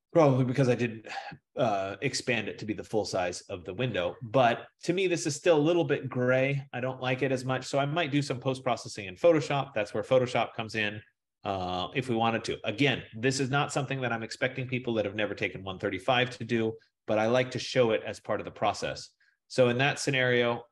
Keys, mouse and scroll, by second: 14.6 F15, 17.6 click, 19.1 click.